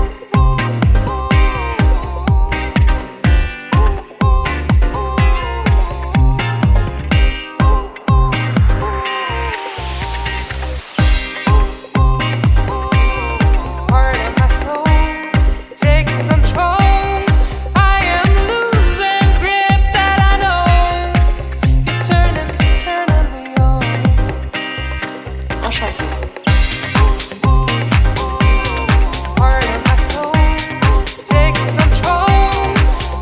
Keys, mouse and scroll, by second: 0.2 scroll down 1, 0.6 shift+a, 3.5 click, 4.4 scroll down 4, 4.7 middle click, 5.2-5.7 scroll up 4, 6.1 scroll down 3, 6.2 middle click, 7.1 click, 8.1 shift+d, 9.1 scroll up 1, 9.1 middle click, 9.8 click, 10.5 scroll up 4, 10.6 middle click, 11.1 click, 12.3 click, 13.5 middle click, 13.9-14.3 scroll down 3, 14.2 middle click, 14.6 click, 15.3 scroll up 1, 15.5 middle click, 16.1 scroll down 2, 16.7 click, 17.5 click, 18.1 click, 18.7 middle click, 19.3-19.8 scroll up 2, 19.4 middle click, 19.8-20.3 scroll down 2, 20.3 shift+a, 26.6 scroll down 1, 26.8 middle click, 27.4 scroll up 3, 27.9 click, 28.6 click, 29.2 scroll up 3, 29.5 middle click, 30.0 click, 33.0 click.